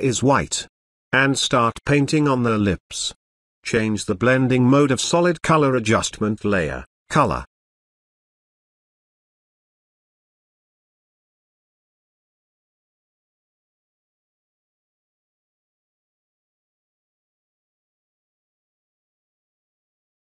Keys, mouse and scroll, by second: 7.9 click, 10.0-16.9 drag, 17.1 ctrl+z, 17.1 space, 17.2 ctrl+drag, 19.0 space, 19.1 ctrl+click, 19.6 [, 19.7 [, 19.9-20.2 drag.